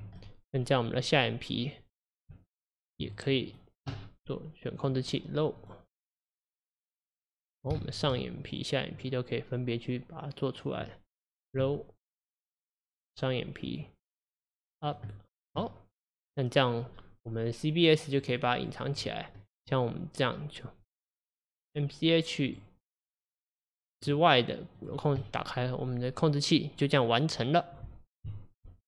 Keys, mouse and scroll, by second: 0.0 Tab, 0.2-1.0 middle drag, 1.0 click, 2.4 Tab, 3.5 click, 4.8 click, 6.9-7.2 scroll down 1, 7.2-8.5 middle drag, 8.5 click, 10.7 click, 12.5 click, 13.7 click, 15.3-15.6 scroll down 1, 15.6-18.2 middle drag, 18.2 click, 18.6 click, 18.9 click, 19.4-20.9 middle drag, 20.9 click, 22.5 click, 24.0 click, 24.8 click, 25.2-28.2 middle drag.